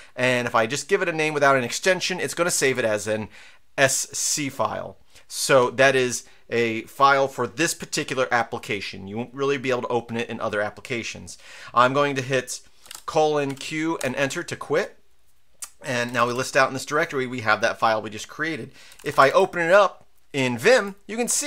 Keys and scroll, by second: 2.6 Return, 12.9-13.5 typing, 14.0 Return, 15.8-16.6 typing, 18.7-19.5 typing, 20.7 Return.